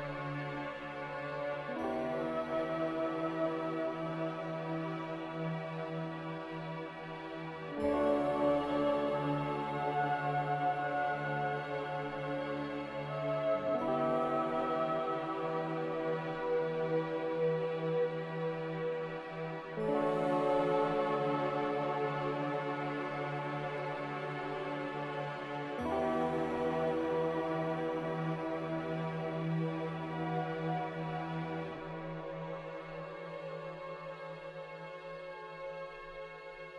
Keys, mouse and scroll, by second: 11.7 z, 15.1-16.3 typing, 16.4 Return, 20.7 b, 23.7 b, 36.0 b.